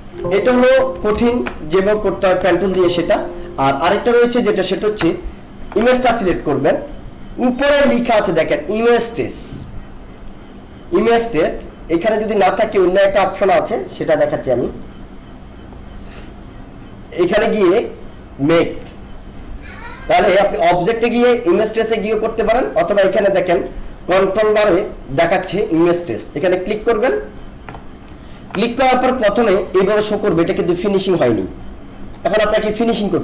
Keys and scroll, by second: 1.1 ctrl+-, 1.8 space, 2.5 alt+space.